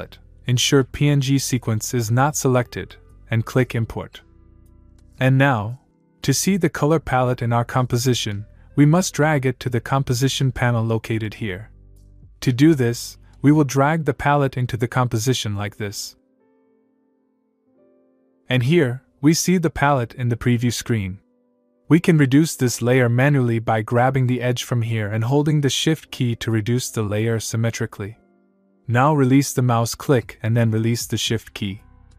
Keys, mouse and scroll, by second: 4.2 click, 15.4-17.8 click, 17.6 click, 23.4-30.8 click, 24.7 click.